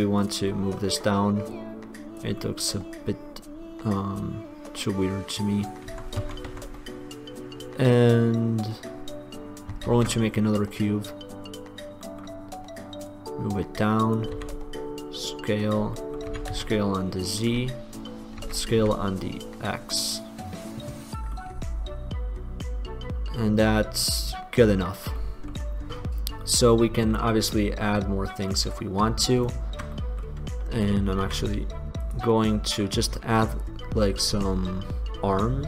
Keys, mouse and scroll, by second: 0.7-3.5 middle drag, 3.7 click, 4.0 click, 6.1 Tab, 6.4 Tab, 6.7 Tab, 10.0 shift+a, 13.2-14.3 middle drag, 14.5 s, 16.5 s, 17.5-19.3 middle drag, 18.5 s, 21.5-22.9 middle drag, 23.4-25.3 middle drag, 28.5 click, 29.5-31.3 drag, 31.4 s, 32.1-32.5 drag.